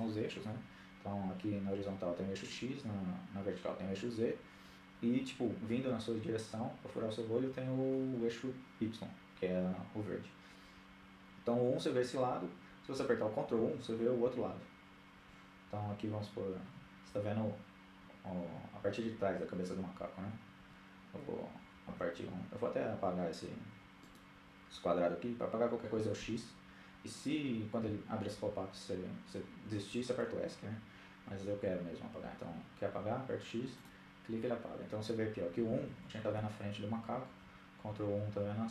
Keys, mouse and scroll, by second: 10.5 KP_1, 13.0 ctrl+KP_1, 19.6 ctrl+KP_1, 20.7 KP_1, 22.8-24.4 right drag, 25.0 x, 30.9 x, 34.4-34.8 KP_1, 35.0 KP_1, 35.3 KP_1, 36.9 ctrl+KP_1.